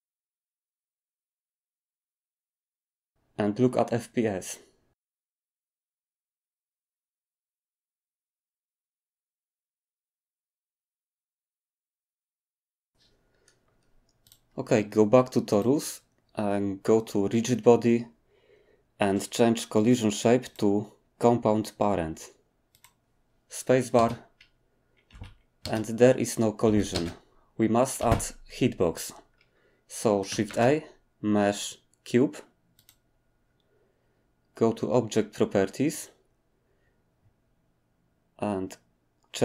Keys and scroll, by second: 0.0-2.0 typing, 0.3 alt+d, 0.6 alt+d, 1.2 alt+d, 24.0 space, 25.1 Escape, 26.7 Escape, 28.0 Escape, 30.4 a, 31.9 typing.